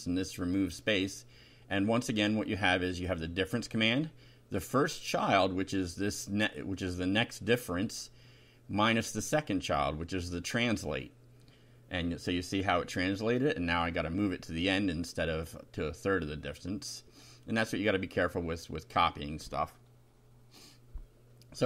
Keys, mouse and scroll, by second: 0.9 Tab, 1.3 Up, 3.0 shift+End, 3.8 ctrl+c, 4.0 ctrl+Up, 4.4 ctrl+Return, 4.8 ctrl+v, 5.1 ctrl+Down, 5.6 ctrl+Up, 5.8 ctrl+Home, 6.2 ctrl+BackSpace, 7.7 Down, 10.0 shift+], 10.3 shift+Up, 10.8 shift+Delete, 12.4 F5, 14.4 Right, 16.9 click, 18.2 Delete, 19.6 F5, 20.5 click.